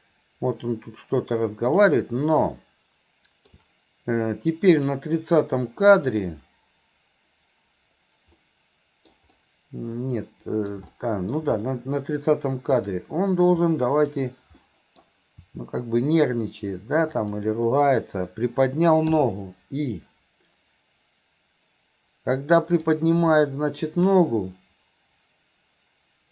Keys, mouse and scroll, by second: 2.6-3.5 middle drag, 4.8 click, 6.1 click, 8.4-9.1 middle drag, 9.3-10.7 middle drag, 10.9-11.3 middle drag, 12.8 click, 13.6 middle click, 14.6 middle click, 22.8 click, 23.4-23.8 middle drag.